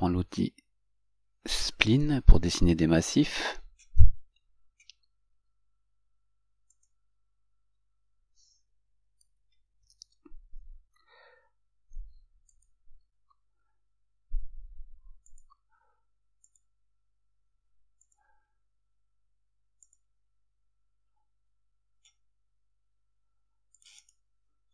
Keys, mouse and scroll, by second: 2.1 click, 7.0 click, 10.1 F8, 12.7 click, 15.5 click, 16.7 click, 18.2 click, 20.1 click, 24.0 click, 24.2 right click.